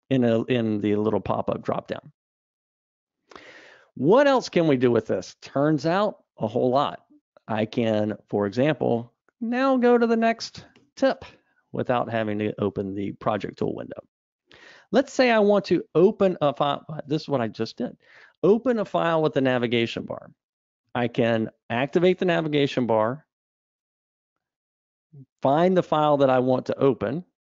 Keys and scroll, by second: 4.3 Escape, 7.8 super+Up, 22.4 super+Up.